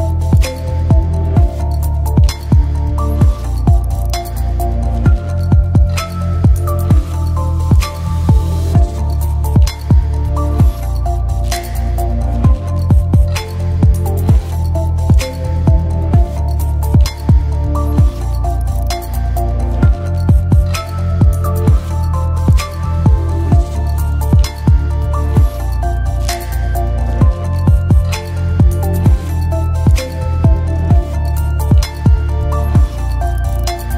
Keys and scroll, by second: 30.8 space.